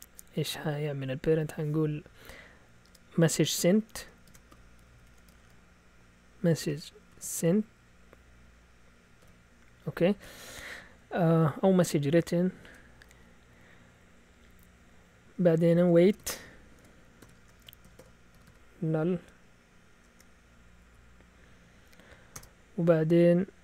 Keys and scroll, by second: 4.0-7.8 typing, 9.2 typing, 11.0 typing, 12.6 typing, 15.6-21.2 typing, 22.3 Return.